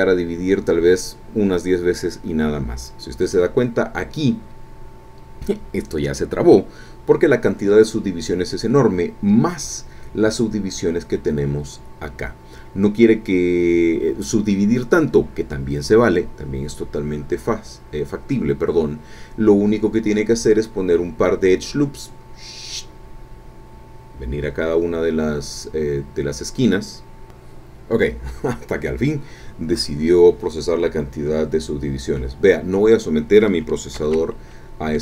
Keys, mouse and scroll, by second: 31.7-32.0 scroll down 2, 32.2-33.7 drag, 33.9 ctrl+z.